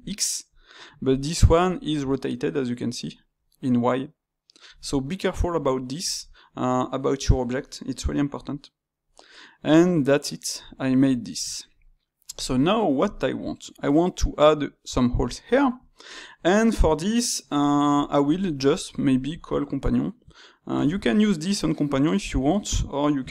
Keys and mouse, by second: 0.4 click, 1.0 click, 5.0-13.0 middle drag, 13.0-15.5 drag, 15.5-20.8 shift+middle drag, 20.8 shift+'.